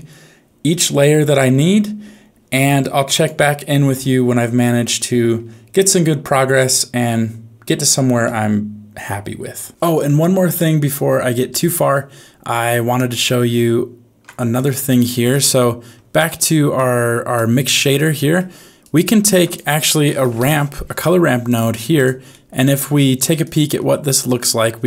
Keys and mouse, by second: 2.8 alt+click, 3.9 x, 5.7 middle click, 6.5 shift+middle click, 8.2 middle click, 13.0 ctrl+Tab, 14.5 click, 15.6 middle click, 16.7 click, 17.7 middle click, 18.9 click, 19.3 shift+a, 22.3 middle click, 23.4 ctrl+shift+click.